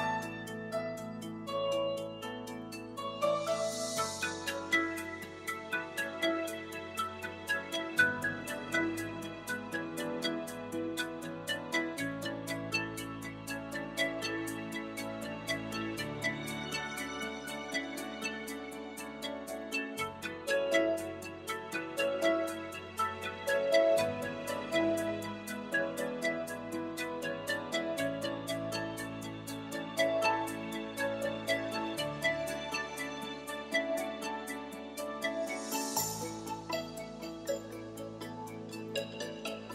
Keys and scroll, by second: 16.0 BackSpace, 28.6 ., 29.0 0, 31.2 0, 31.6 i, 33.1 BackSpace, 34.1 5.